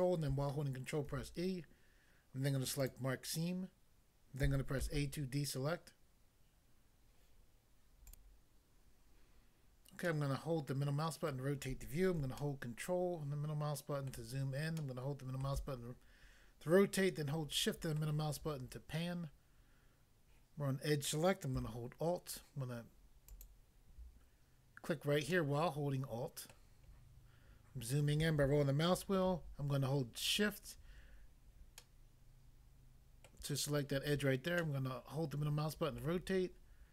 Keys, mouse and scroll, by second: 1.0 ctrl+e, 2.8 click, 2.8 click, 4.8 a, 8.0 click, 8.2 click, 10.1 middle click, 11.3 middle click, 12.4 ctrl+middle click, 17.0 shift+middle click, 23.3 alt+click, 23.5 alt+click, 25.3 middle click, 26.5 middle click, 27.0-27.8 scroll up 1, 30.3 shift+click, 30.4 shift+click, 31.8 middle click, 33.3 middle click, 34.6 middle click, 36.0 middle click.